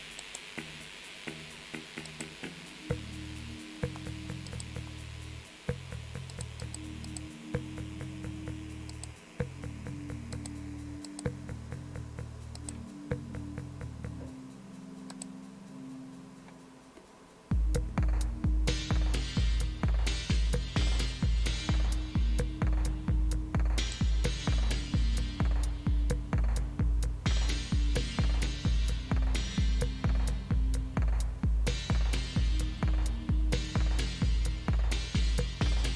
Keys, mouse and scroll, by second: 0.2 right click, 2.1 click, 4.5 click, 6.3 click, 6.6 click, 7.1 click, 8.9 click, 10.4 click, 11.1 click, 12.6 click, 15.1 click, 16.9 scroll down 1, 17.9-20.4 scroll down 1, 20.4-21.2 scroll up 2, 21.2-22.0 scroll up 1, 23.8 click, 32.1-32.6 scroll down 2.